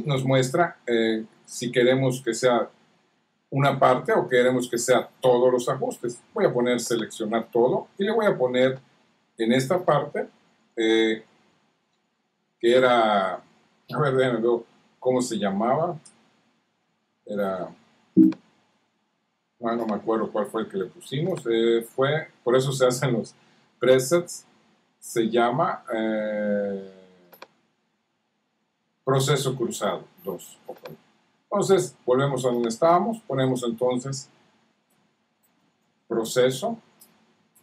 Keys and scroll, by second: 34.8 shift+p.